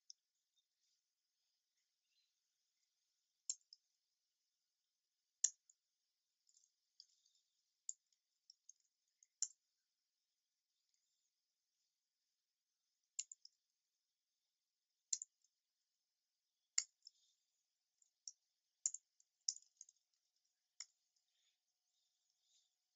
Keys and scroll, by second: 3.6 alt+Return, 9.7 Return, 13.1 super+z, 20.9 Return.